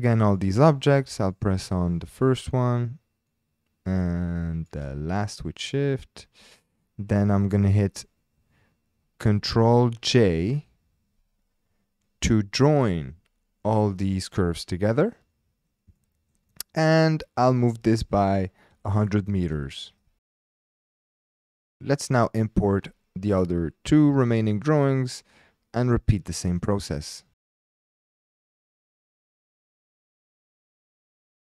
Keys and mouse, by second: 0.3 click, 3.3-4.8 drag, 5.6 shift+click, 16.0-16.3 shift+drag, 17.4 g, 17.5 x, 18.7 KP_1, 18.9 KP_0, 19.1 KP_0, 19.5 KP_Enter, 20.8-21.5 shift+drag, 27.6 click, 28.8 click, 29.0 shift+click, 29.1 s, 29.2 KP_1, 29.3 KP_0, 29.3 KP_Enter, 29.3 KP_0.